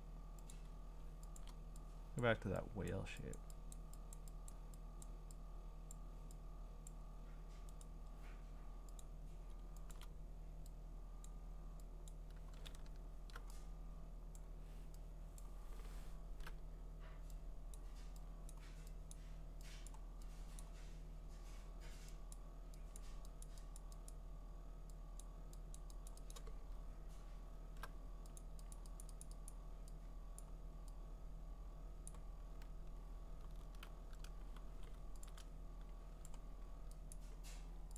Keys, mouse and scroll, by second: 0.5 click, 1.4 click, 2.2 click, 2.9 click, 3.4 click, 3.7 click, 4.2 click, 4.5 click, 5.0 click, 5.9 click, 6.9 click, 7.8 right click, 9.0 click, 9.9 click, 11.2 click, 12.1 click, 12.7-13.3 scroll, 14.4 click, 15.4 click, 15.8 middle click, 15.9 middle click, 16.2 middle click, 16.3 middle click, 17.8 click, 18.5 click, 19.1 click, 19.9 click, 20.6 click, 22.3 click, 23.0 click, 23.4 click, 23.8 click, 24.1 click, 25.2 click, 25.7 click, 26.1 click, 26.3 click, 26.8-28.4 scroll, 28.4 click, 28.7 click, 29.0 click, 29.2 click, 29.5 click, 30.4 click, 32.1 click, 32.6-33.6 scroll, 34.7 v, 35.3 ctrl+click, 36.3 click, 37.1 click.